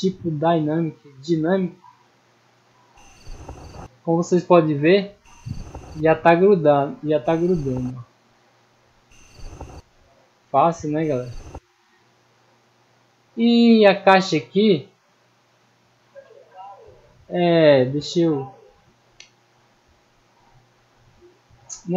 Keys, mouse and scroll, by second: 1.2 click, 2.2 middle click, 2.2-2.7 scroll down 1, 3.9-4.7 middle drag, 6.1-6.7 middle drag, 8.0-8.7 middle drag, 9.9-10.6 middle drag, 12.2 right click, 12.8-14.2 middle drag, 20.7-21.2 middle drag, 21.6 scroll up 1.